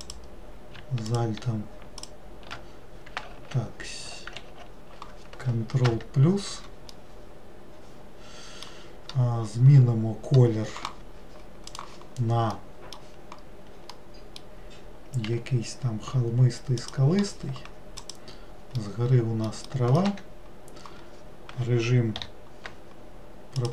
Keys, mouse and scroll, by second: 0.2 alt+click, 1.2 alt+shift+click, 2.2 alt+shift+click, 3.5 ctrl+z, 4.7 ctrl+z, 6.0 ctrl+KP_Add, 7.1-10.1 middle drag, 12.7-15.5 middle drag, 15.5 g, 18.2 click, 18.9-20.3 middle drag, 20.3 1.